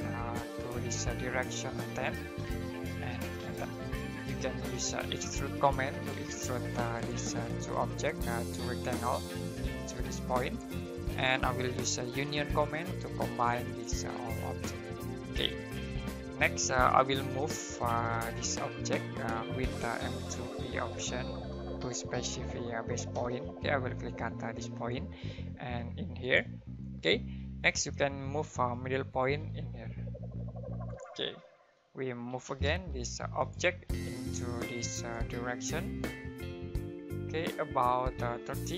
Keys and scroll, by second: 2.5-6.1 typing, 9.1 space, 11.8-13.1 typing, 15.3 space, 18.4 typing, 19.6-21.5 typing, 23.1 space, 32.3 typing, 34.1 space.